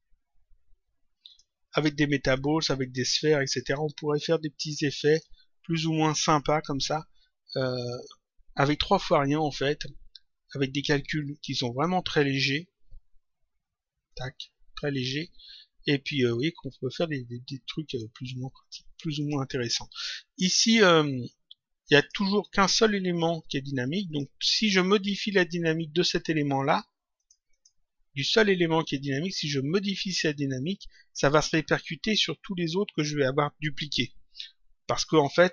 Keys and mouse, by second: 1.2 click, 2.3 click, 3.4 click, 5.0 click, 14.0 click, 17.8 click, 19.1 click, 21.9 click, 24.0 click, 27.1 click.